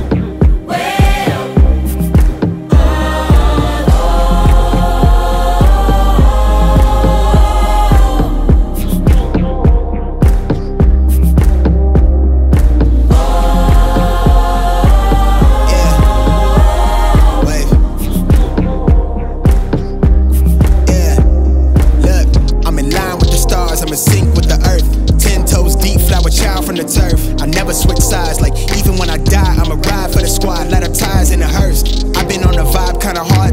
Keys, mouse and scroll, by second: 0.3 scroll up 1, 1.2-6.1 drag, 9.1 click, 12.5 click, 12.5 middle click, 14.6-17.6 drag, 18.2 middle click, 19.7-22.5 drag, 22.8-23.9 scroll up 1, 23.9-26.1 drag, 26.6 middle click, 28.0-30.2 drag.